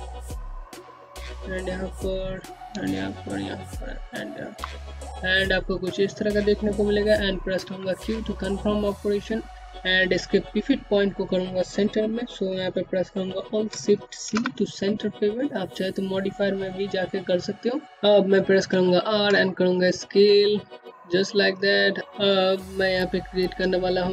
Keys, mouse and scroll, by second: 0.0-2.6 typing, 0.6 click, 1.3 click, 2.3 click, 5.5 q, 6.0 scroll down 1, 11.4 alt+Num_Lock, 12.1 c, 17.0 r, 17.7 middle click, 17.8 r.